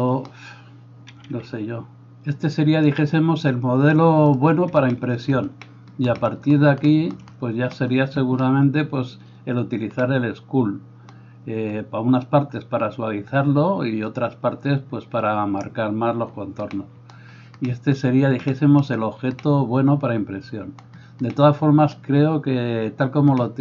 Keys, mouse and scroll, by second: 2.5-4.4 drag.